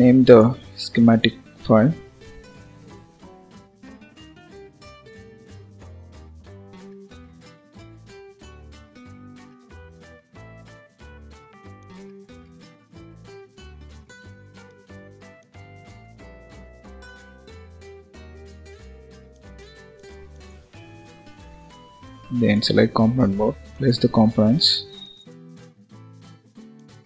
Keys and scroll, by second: 21.5 ctrl+s.